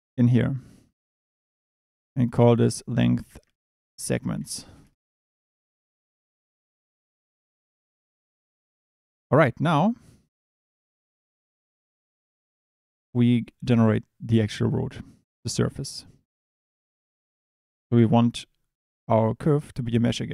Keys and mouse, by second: 0.0 click, 2.0 click, 2.3-4.8 drag, 5.9 click, 17.4 click, 18.1 shift+a.